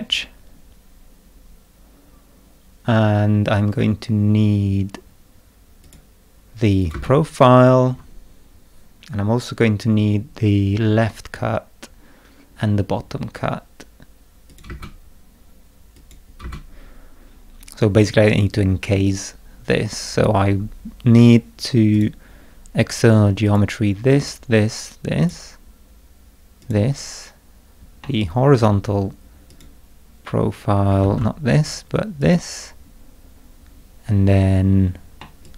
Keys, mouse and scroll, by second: 5.8 click, 6.8 click, 6.9 space, 14.5 click, 14.7 space, 15.9 click, 16.4 space, 19.0 scroll up 2, 21.9 click, 23.4 click, 24.2 click, 25.2 click, 26.6 click, 28.0 middle click, 28.2 click, 29.5 click, 31.0 ctrl+z, 32.2 click, 35.2-35.5 middle drag, 35.4-35.5 drag.